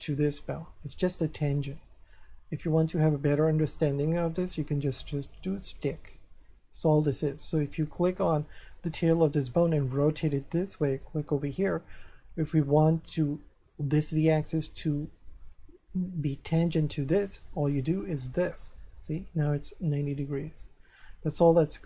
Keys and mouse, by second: 0.2 right click, 3.4 click, 4.9 click, 6.1 middle click, 8.1 right click, 10.1 click, 11.0 right click, 17.4 ctrl+n, 18.2 click.